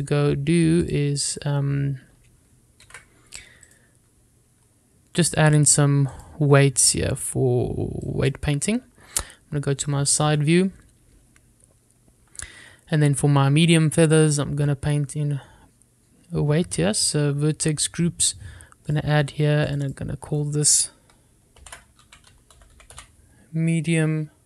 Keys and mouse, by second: 2.0 click, 4.0 ctrl+s, 4.8 click, 7.4 click, 11.1 shift+middle click, 20.1 click, 20.9 click, 21.2 click.